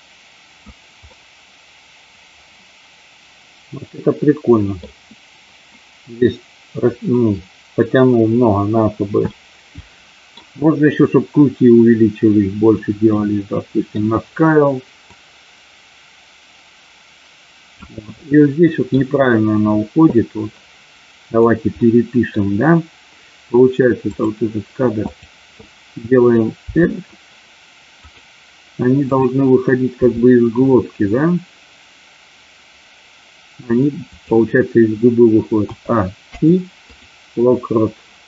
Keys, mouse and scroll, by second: 1.0-4.7 middle drag, 9.2-10.4 middle drag, 13.1 middle click, 15.1-17.9 drag, 18.1 middle click, 21.8 middle click, 24.0 click, 25.0 click, 26.8 r, 28.0 click, 30.0 r, 34.1 click, 35.6 a, 36.1 i.